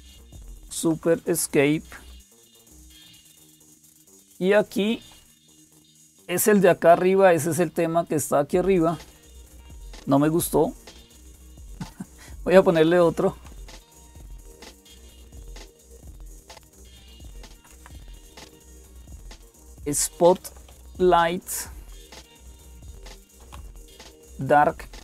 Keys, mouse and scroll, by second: 0.0-25.0 typing, 0.5 super+Escape, 9.3 click, 14.5-15.5 Left, 15.7 Left, 15.9 Left, 16.1 Left, 16.3 Left, 16.4 Left, 16.6 Left, 16.8 Left, 17.0 Left, 17.3 Left, 17.5 Left, 21.6 Left, 21.6 Delete, 21.8 Delete, 22.0-23.5 Delete.